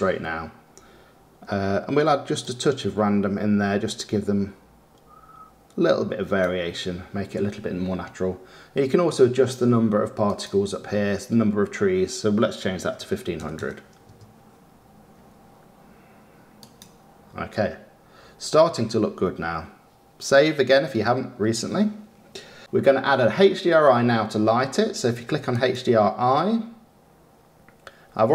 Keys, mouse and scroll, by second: 3.2-5.9 drag, 14.6 KP_0, 16.8 click, 25.7 click.